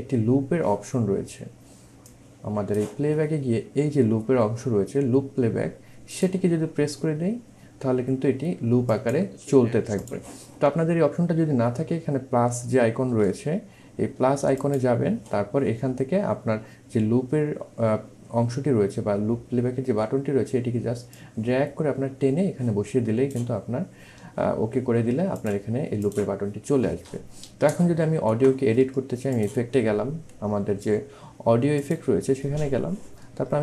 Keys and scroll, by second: 13.5 1, 14.7 1.